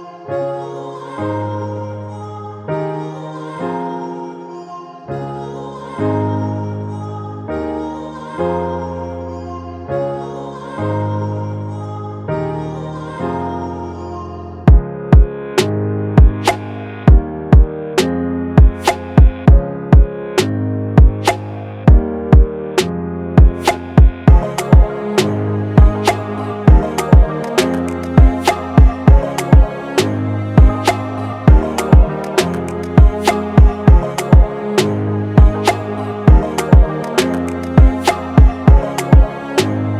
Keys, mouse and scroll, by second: 1.9 right click, 3.5-4.6 typing, 6.3-7.6 typing, 9.3 typing, 11.7-12.5 scroll down 1, 12.5 typing, 18.7-20.6 typing, 20.8 double click, 27.5 double click, 30.4 double click, 33.3 click, 33.6 ctrl+t, 37.1 Return, 37.7 Down, 38.1 Up.